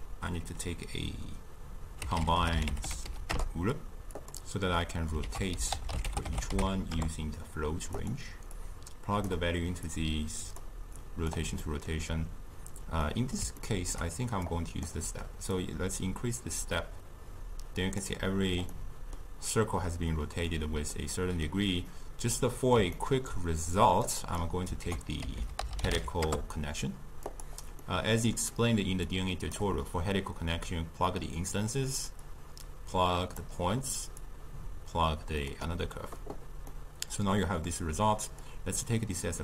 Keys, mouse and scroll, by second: 9.4-10.7 drag, 15.8-18.8 drag, 18.8-27.4 middle drag, 27.4 ctrl+a, 33.5-35.7 drag, 36.8-38.7 middle drag, 38.7-39.4 drag.